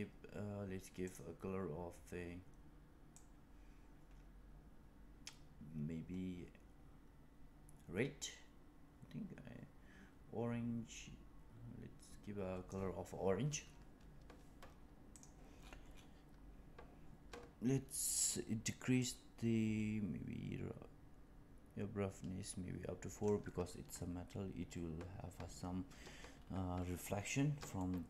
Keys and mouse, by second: 1.0 click, 15.0 click, 19.1-23.2 drag, 27.9 shift+middle click.